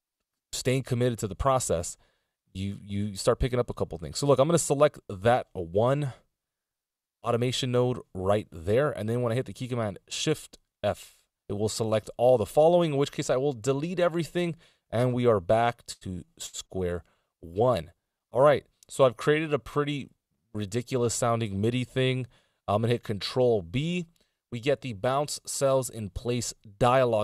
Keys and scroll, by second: 2.0 *, 13.7 BackSpace, 16.6 a, 18.0 p, 23.2 ctrl+b.